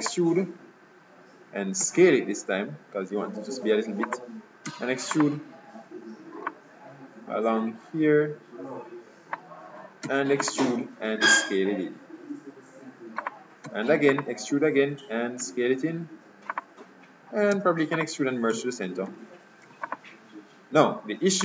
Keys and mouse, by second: 1.9 s, 4.8 e, 6.6-8.2 drag, 10.2 e, 11.4 s, 13.7 e, 15.5 s, 17.7 e, 19.2 alt+m.